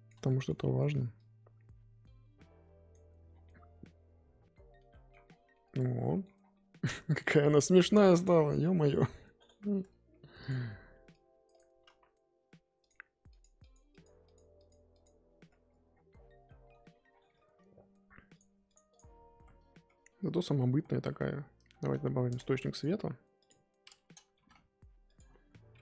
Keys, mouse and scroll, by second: 0.2 shift+middle click, 1.1-3.3 drag, 3.3 scroll down 3, 3.4-5.2 middle drag, 5.2 scroll down 6, 5.5 middle click, 6.2 scroll up 1, 6.3 scroll down 1, 6.5 middle click, 6.8-8.6 scroll up 10, 8.6-10.6 middle drag, 11.1 click, 11.9 ctrl+z, 13.3-15.7 drag, 15.7 scroll up 2, 15.9-16.4 scroll down 6, 16.4 middle click, 18.7 drag, 19.4-20.9 typing, 19.6 scroll up 3, 23.5 shift+a, 24.3 g.